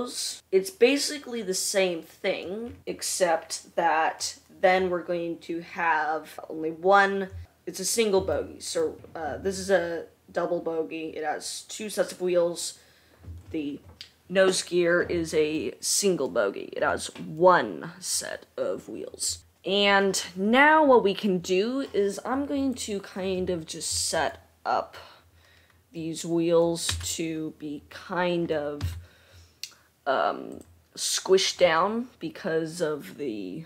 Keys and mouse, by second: 22.9 click, 23.3-30.1 middle drag, 27.6 Tab, 29.3 1, 30.7 click.